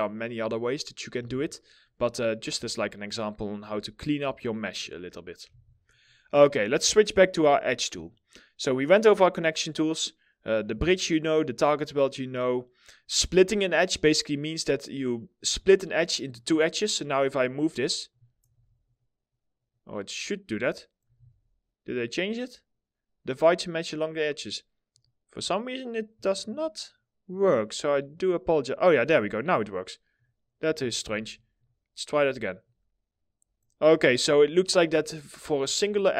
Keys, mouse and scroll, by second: 0.7 w, 0.9 scroll down 1, 1.4 middle click, 2.3 alt+middle click, 3.9 alt+middle click, 4.4 scroll up 1, 5.0 2, 16.2-17.7 scroll up 1, 20.6 ctrl+z, 25.8 ctrl+click, 30.3 ctrl+z, 33.6 ctrl+z, 34.1 middle click, 34.6 alt+middle click, 35.9 ctrl+click.